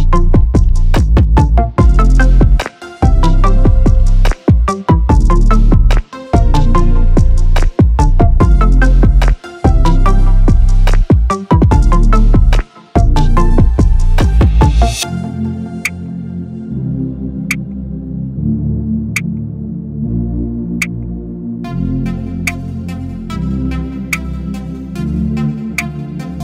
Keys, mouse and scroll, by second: 0.1 click, 0.6 click, 0.8-2.5 right drag, 2.5 click, 2.8-4.4 right drag, 4.9 click, 5.2-6.7 right drag, 6.7 click, 7.0-8.3 right drag, 8.3 click, 8.7-9.9 right drag, 9.9 click, 10.6 click, 11.1-12.6 right drag, 12.6 click, 14.5-16.0 right drag, 16.0 click, 16.5 click, 16.7-18.1 right drag, 18.1 click, 19.0 click, 19.3-21.2 right drag, 21.2 click, 22.4 click, 23.0 click, 23.2-24.5 right drag, 24.5 click, 25.3 click, 25.7-26.4 right drag.